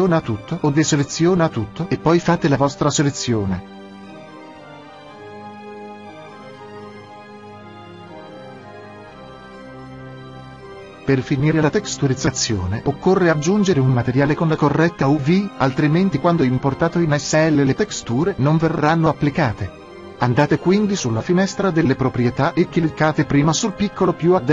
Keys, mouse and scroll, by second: 0.6-4.7 drag, 1.5 g, 4.8-6.8 drag, 13.2-17.1 middle drag, 22.9-24.5 middle drag.